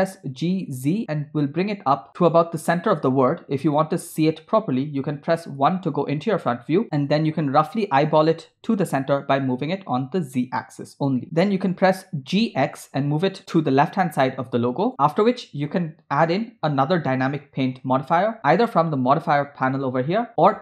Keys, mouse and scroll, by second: 5.5 KP_1, 8.2 g, 11.7 g, 18.5 click, 19.4 click.